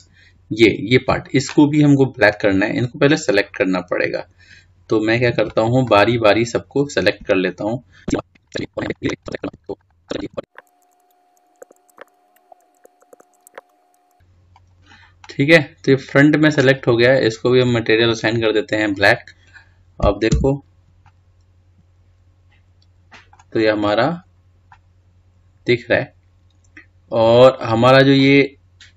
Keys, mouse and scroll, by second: 3.8-4.3 scroll down 1, 4.3-5.8 scroll up 2, 5.8-6.4 scroll down 2, 6.4-8.1 shift+middle drag, 8.1 c, 9.2 shift+middle click, 9.5 c, 10.3 shift+middle click, 10.3 scroll up 3, 10.6 c, 11.6 shift+middle click, 12.0 c, 12.8 shift+middle click, 13.0 shift+scroll up 1, 13.1 shift+middle click, 13.5 c, 16.2-18.9 middle drag, 18.9 click, 19.8-21.3 scroll down 2, 21.3 Tab, 22.0-24.5 middle drag, 24.5-25.6 scroll down 2, 25.6-28.7 middle drag.